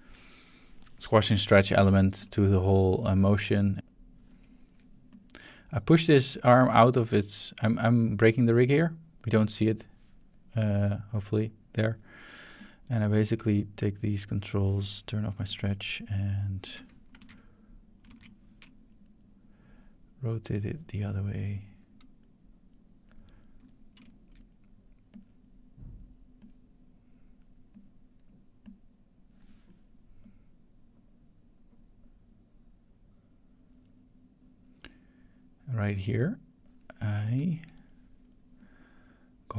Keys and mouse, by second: 2.2-4.2 drag, 5.1-7.9 drag, 10.6-11.8 drag, 12.6 drag, 13.5 shift+click, 14.4 middle click, 15.4 click, 17.2 alt+g, 18.1 alt+r, 18.6 typing, 19.0 middle click, 19.7 click, 21.0 middle click, 21.5 click, 22.7-23.4 drag, 22.7-23.3 middle drag, 23.5 middle drag, 25.1 click, 26.4 click, 27.7 click, 28.6 click, 30.2-36.7 drag, 37.2 shift+middle click, 37.5-38.4 ctrl+drag, 38.6-39.5 drag.